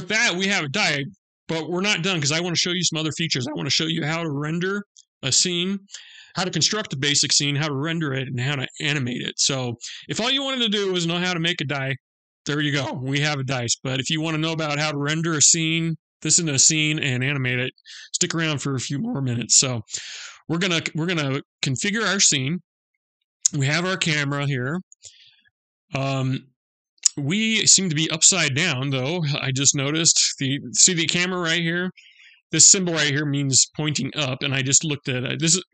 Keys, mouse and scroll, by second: 12.8 middle click, 17.2 middle click, 19.5-20.0 scroll down 2, 21.4 scroll down 1, 21.6 middle click, 22.1-23.6 scroll down 4, 23.8 middle click, 23.8 scroll down 2.